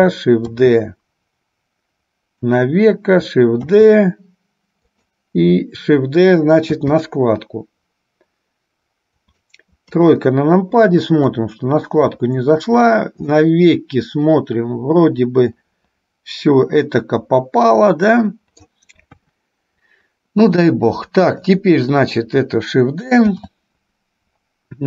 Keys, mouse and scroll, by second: 0.8 shift+d, 3.8 shift+d, 7.0 shift+d, 10.1 KP_3, 11.6-12.7 drag, 13.6-19.0 middle drag, 19.3 KP_1, 21.3 click, 23.5 shift+d.